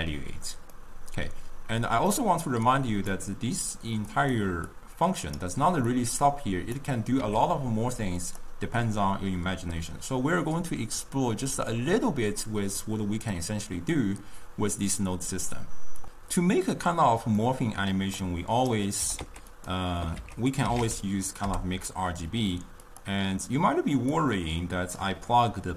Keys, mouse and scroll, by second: 0.8-2.3 middle drag, 2.3 click, 4.3 click, 4.8-7.9 drag, 7.9 g, 17.5 middle click, 18.4 click, 19.1 g, 20.2 ctrl+a, 24.8 click.